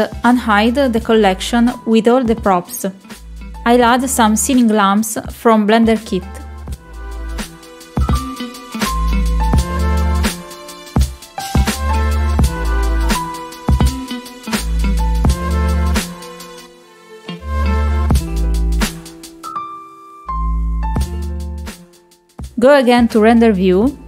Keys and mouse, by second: 4.3-5.3 drag, 8.8 middle click, 9.7 click, 10.0 middle click, 10.3 middle click, 10.7 click, 12.1 middle click, 12.9 g, 15.6 click, 15.9 right click, 16.9-18.7 drag, 19.3 click, 19.3 right click, 20.1 click, 21.2 click, 21.3-24.0 right drag.